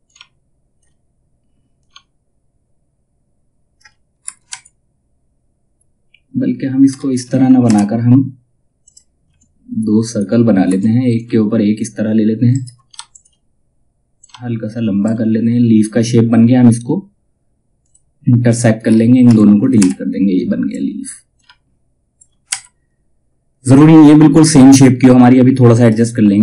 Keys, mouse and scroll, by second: 1.3-3.7 drag, 3.7 space, 6.4 space, 8.3 click, 10.2 space, 10.7-12.0 drag, 12.0 right click, 12.6-25.0 drag, 25.0-26.4 drag.